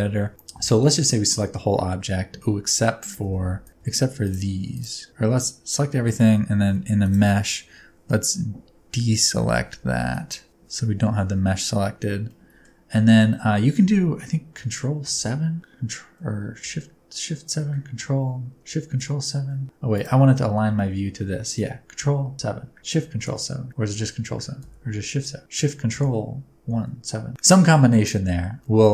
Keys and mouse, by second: 0.7 a, 1.0 middle click, 3.1 3, 5.1-8.1 drag, 5.1-8.1 middle drag, 5.1-8.1 right drag, 5.2 a, 10.1 click, 12.2 middle click, 12.9 middle click, 15.0 ctrl+KP_7, 16.6 shift+KP_7, 20.7 shift+middle click, 22.0 ctrl+KP_7, 23.2 ctrl+shift+KP_7, 23.8 ctrl+KP_7, 24.6 shift+KP_7.